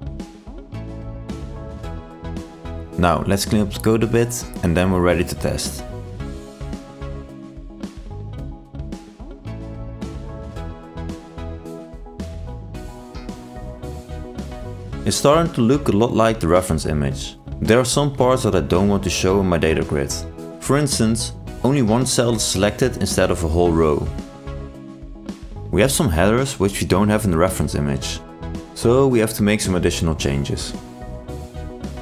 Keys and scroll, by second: 12.8 ctrl+e, 13.9 ctrl+r, 31.4 ctrl+e.